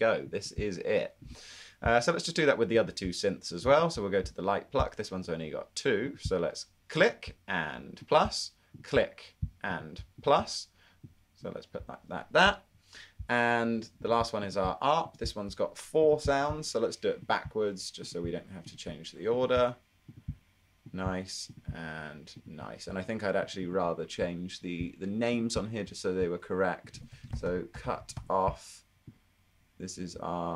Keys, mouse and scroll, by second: 27.0-29.1 typing.